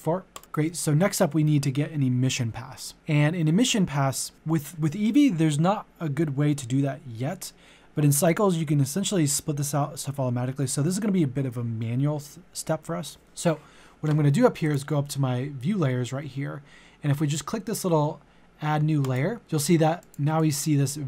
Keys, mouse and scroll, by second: 13.4 click, 19.4-21.0 drag.